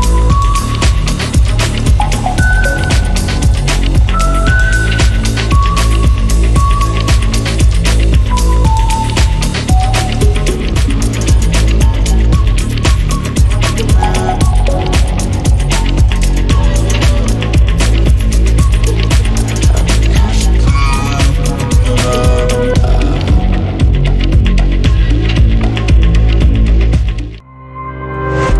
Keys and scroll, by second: 0.0-0.4 typing, 2.1 shift+b, 2.4 i, 2.8 BackSpace, 4.4-11.4 typing, 12.4 Return, 12.8-18.9 typing, 26.6 Escape.